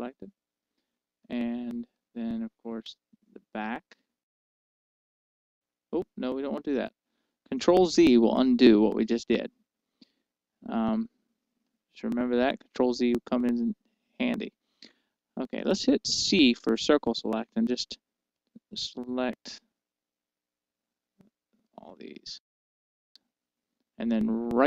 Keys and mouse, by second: 0.3-2.3 middle drag, 2.6-5.2 middle drag, 5.2-7.2 right drag, 8.3 ctrl+z, 9.4-17.2 middle drag, 17.2 c.